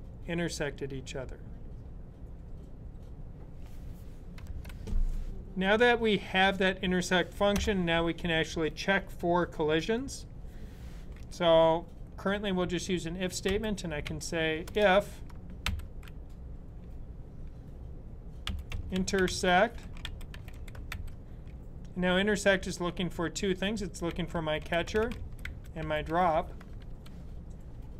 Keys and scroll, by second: 13.3-15.3 typing, 18.3-21.2 typing, 23.7-26.7 typing.